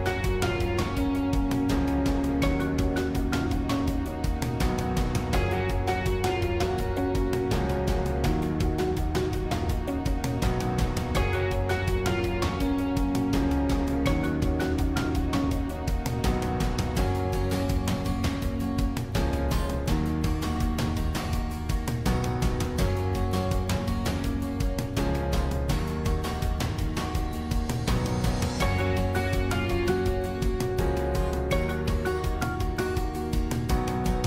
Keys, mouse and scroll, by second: 2.0 scroll down 1, 4.1-6.2 middle drag, 6.2 shift+click, 6.7-8.8 middle drag, 8.8 shift+click, 9.2-10.2 middle drag, 10.2-10.6 scroll up 2, 11.5 shift+click, 12.4 shift+click, 13.1-14.7 middle drag, 14.7-16.0 scroll up 2, 16.5 shift+click, 16.9 middle click, 17.6 scroll up 1, 17.8 scroll down 1, 18.2-21.7 middle drag, 21.7 shift+click, 22.0 scroll down 2, 22.3-23.4 middle drag, 23.4-23.9 scroll up 3, 23.9 middle click, 24.2-24.6 scroll down 3, 24.6-26.2 middle drag, 26.2-26.7 scroll up 1, 26.7-27.3 scroll up 2, 27.3 scroll up 1, 27.4 click, 28.2-29.6 scroll up 1, 29.6 shift+click, 30.0-32.8 middle drag, 32.8 shift+click.